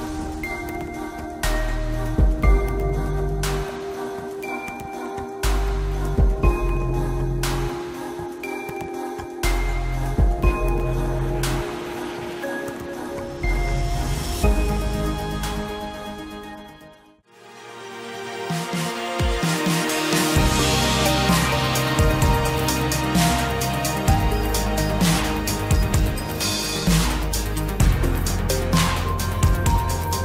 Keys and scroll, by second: 14.2 ctrl+t.